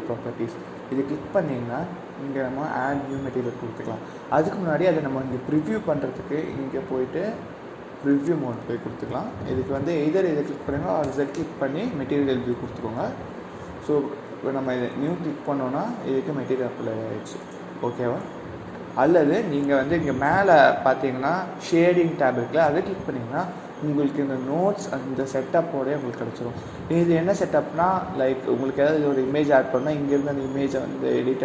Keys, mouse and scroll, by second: 9.7-11.6 drag, 11.6 z, 15.3 click, 18.0 KP_0, 18.6 KP_0.